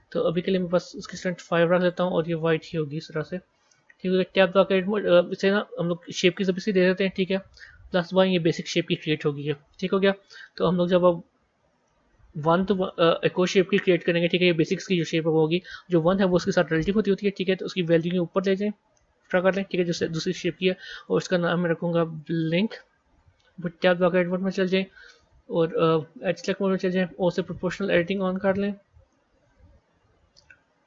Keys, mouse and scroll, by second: 4.3 b, 5.0 Tab, 6.2 click, 7.8-10.4 drag, 10.4 KP_1, 11.7-13.0 shift+middle drag, 13.0-16.0 scroll up 4, 16.0-20.9 drag, 20.9-24.0 drag, 24.2 b, 26.3 click, 28.5 middle click, 29.5 KP_1, 30.3 shift+middle click.